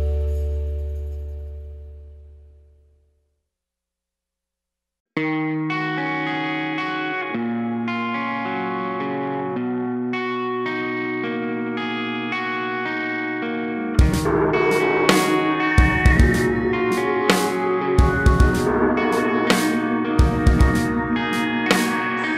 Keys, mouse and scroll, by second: 0.3 x, 0.8 shift+d, 2.1 KP_Decimal, 5.5-5.9 scroll down 2, 5.9 g, 6.9 Tab, 7.1-7.5 scroll down 2, 7.5 1, 10.1 alt+click, 10.4 g, 11.5 Tab, 12.7 right click, 13.1-13.5 scroll down 1, 13.5 click, 15.7 g, 16.5 alt+a, 16.9 click, 17.2 scroll up 1, 18.9 shift+d, 21.9 Tab.